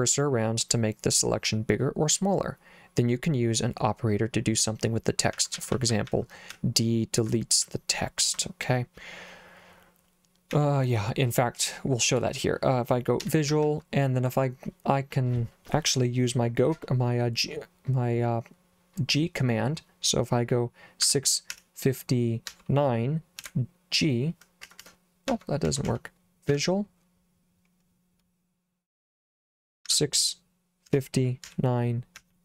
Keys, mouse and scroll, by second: 5.3-6.6 typing, 7.6 j, 10.5 k, 13.0-14.0 typing, 21.0 6, 21.6 5, 22.5 9, 23.4 g, 24.7 Escape, 24.8 Escape, 25.1-26.5 typing, 29.9 6, 30.9 5, 31.5 9, 32.2 j.